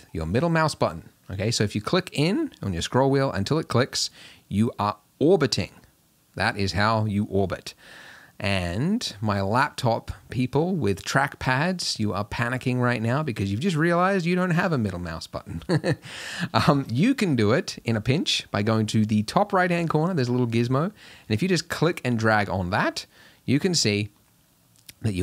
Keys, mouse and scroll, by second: 2.7-5.6 middle drag, 14.2-17.8 middle drag, 21.1-22.5 drag.